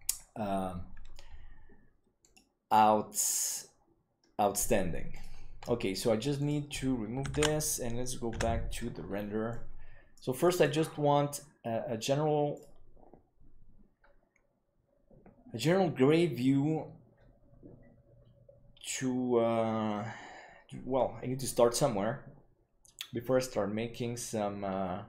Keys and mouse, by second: 2.2-4.3 drag, 6.3 click, 7.5 ctrl+s, 8.4 F12.